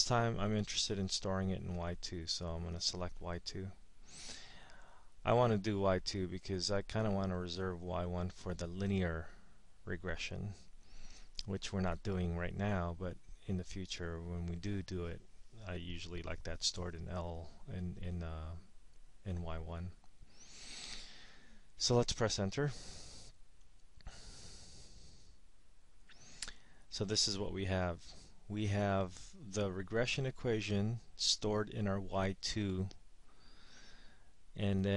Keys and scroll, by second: 1.0 Down, 4.4 Return, 23.7 Return.